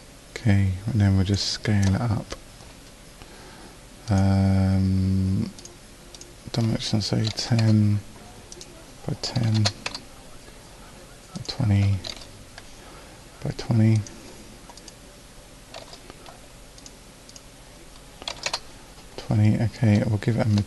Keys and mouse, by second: 6.2-8.6 drag, 17.3-20.6 middle drag.